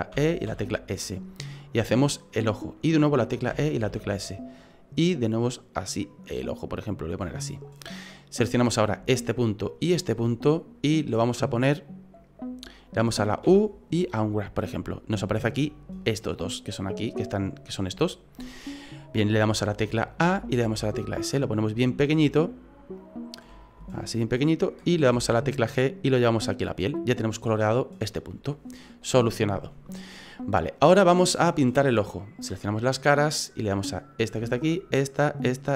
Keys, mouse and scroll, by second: 0.1 e, 3.5 e, 8.5 right click, 9.6 shift+right click, 13.5 u, 20.2 a, 20.6 s, 22.2 s, 25.1 g, 26.9 right click, 32.7 click, 34.1 right click, 34.7 shift+right click.